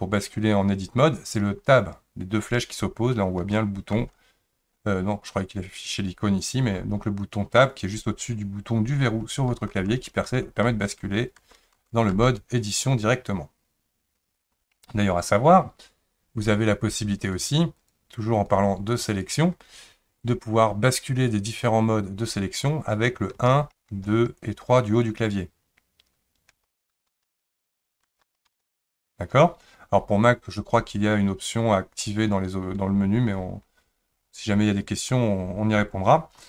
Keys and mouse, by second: 3.5 Tab, 3.9 Tab, 9.6 Tab, 9.9 Tab, 10.3 Tab, 10.7 Tab, 11.0 Tab, 11.4 Tab, 11.8 Tab, 12.1 Tab, 17.2 click, 18.4 click, 19.1 click, 23.9 1, 23.9 2, 24.4 3, 26.5-28.5 typing.